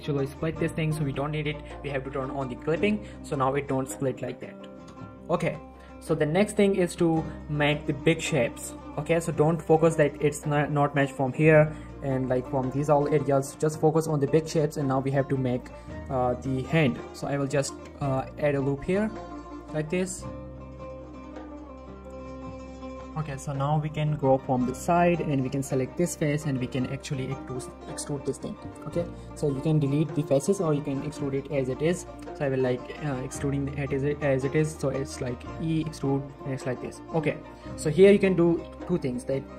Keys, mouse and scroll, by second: 0.7 right click, 2.6 click, 3.3 g, 3.9 right click, 5.7 z, 5.9 scroll up 1, 6.8 scroll down 1, 7.2 shift+middle click, 9.4 shift+middle click, 9.5 shift+scroll down 1, 9.6-11.2 scroll up 1, 12.2 scroll down 1, 12.4 shift+middle click, 12.9 shift+middle click, 13.7-15.2 scroll up 2, 17.4 ctrl+r, 18.0 click, 19.9 click, 22.0 click, 23.3 shift+middle click, 24.1 z, 25.5 click, 26.4-26.8 scroll down 1, 26.8 middle click, 33.3 scroll up 1, 33.8-34.1 scroll down 1, 34.1 r, 34.6 right click, 35.1 e, 36.3 click, 39.2 z, 39.4 shift+middle click.